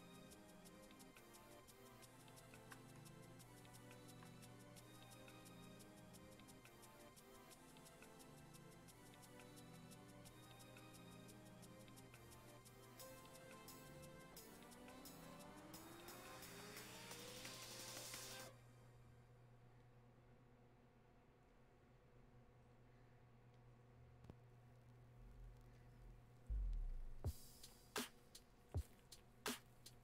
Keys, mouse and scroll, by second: 15.7-21.5 drag, 21.5-30.0 drag.